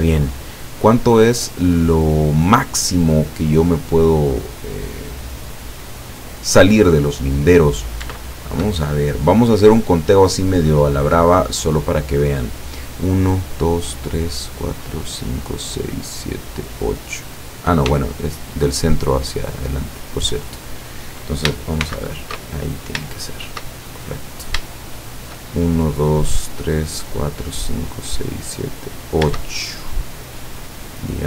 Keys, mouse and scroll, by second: 3.5 scroll down 1, 4.2 scroll down 1, 4.8-5.7 scroll down 2, 7.6-8.0 scroll up 1, 8.2-10.9 shift+middle drag, 11.7 scroll down 2, 18.0 shift+middle click, 21.9 shift+c, 22.7-23.0 shift+scroll up 3, 23.2-24.7 shift+middle drag, 24.8 shift+middle click, 25.2 shift+scroll up 2, 29.6 shift+scroll down 2, 30.0 middle click, 31.0-31.2 middle drag.